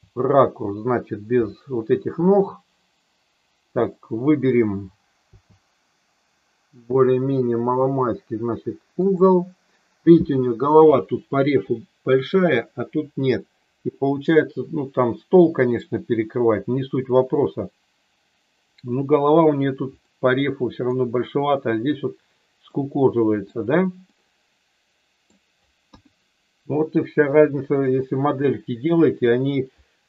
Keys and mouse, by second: 1.4 Right, 5.3 Left, 8.9 click, 20.0 middle click, 22.7 middle click, 24.0-25.2 middle drag, 25.9 KP_1, 27.2 KP_3.